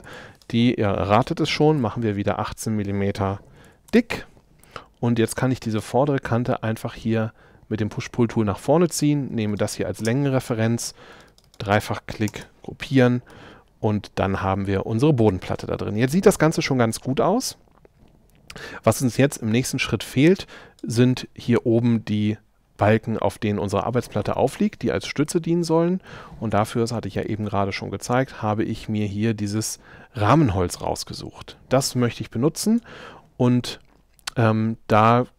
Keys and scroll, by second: 0.1 p, 1.6 1, 3.5 m, 10.0 space, 12.3 super+g.